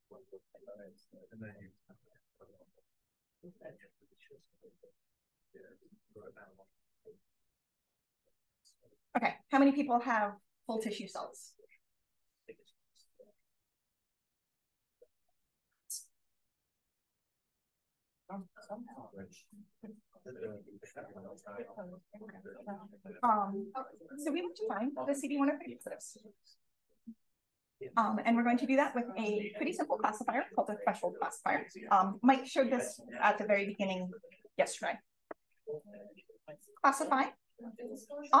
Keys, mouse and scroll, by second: 3.1-4.0 scroll up 1, 4.0-4.5 drag, 4.0-4.7 scroll up 1, 5.4-6.2 scroll up 1, 6.2-6.6 drag, 6.2-7.7 scroll up 1, 7.7-9.3 scroll up 1, 9.3-14.4 scroll up 1, 14.4-16.2 scroll up 1, 16.2-17.0 scroll up 1, 20.8 click, 22.4 click, 22.6-23.2 drag, 23.2-24.7 scroll up 1, 24.7-30.6 scroll up 1, 30.6-34.9 scroll up 1, 34.9-36.6 scroll up 1, 36.6-38.4 scroll up 1.